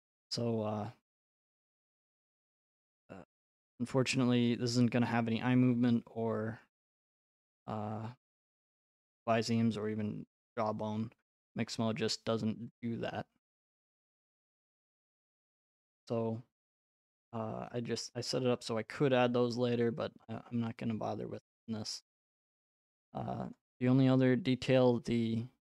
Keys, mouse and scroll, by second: 0.2 x, 0.9 middle click, 1.0 middle click, 1.4 middle click, 1.4 right click, 3.6 click, 6.6 click, 7.1-7.6 scroll, 8.5 right click, 10.0-10.5 scroll, 11.4 right click, 11.6-12.1 scroll, 12.8 click, 12.8-13.4 scroll, 15.0 click, 15.4 click, 15.6-16.2 scroll, 18.0 right click, 18.3-19.9 scroll, 19.9-20.2 scroll, 22.0 right click, 23.6 click.